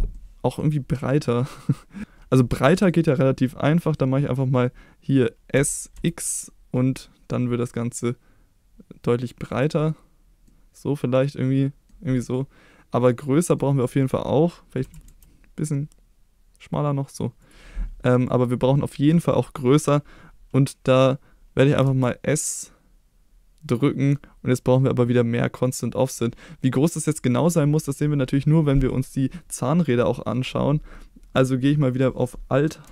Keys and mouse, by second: 0.1-0.6 middle drag, 2.6 shift+middle drag, 5.5 s, 5.9 x, 9.5 click, 10.4-11.8 middle drag, 12.3-13.6 middle drag, 14.8 s, 15.0 x, 17.4 click, 21.8 s, 27.3 click.